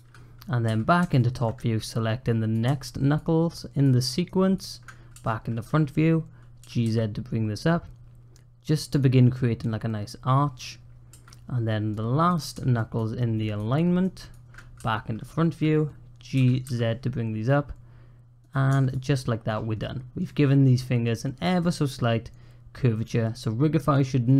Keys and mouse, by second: 0.5 `, 1.0 shift+click, 1.8 click, 2.8 shift+click, 3.6 shift+click, 4.1 shift+click, 6.4 g, 11.8 click, 12.7 shift+click, 14.1 shift+click, 16.2 g, 18.6 Tab, 18.7 click, 19.0 click, 19.7 click, 20.1 click, 21.7-22.1 drag, 22.1-23.8 middle drag.